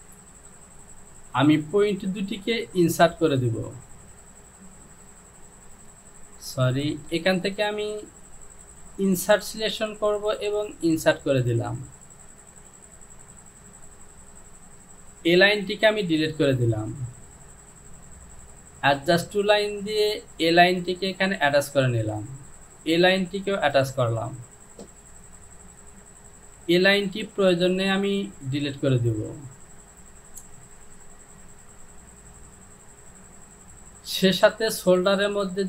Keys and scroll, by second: 7.2 ctrl+z, 15.4 Delete, 26.8 Delete.